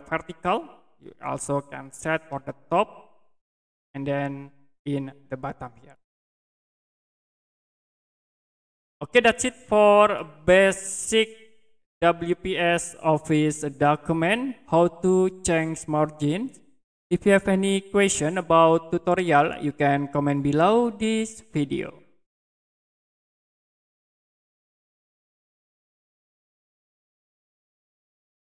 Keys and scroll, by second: 23.9 Print.